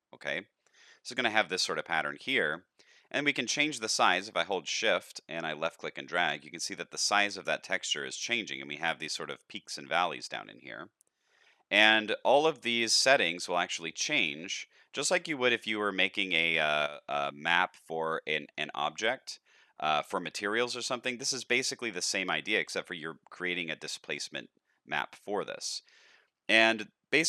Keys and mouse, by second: 3.4-8.6 shift+drag, 9.3 middle click, 12.4-14.3 shift+drag, 16.3 middle click, 17.6 middle click, 18.2 middle click, 18.8-19.5 middle drag, 19.8 middle drag, 20.9-21.4 shift+middle drag, 21.6 middle click.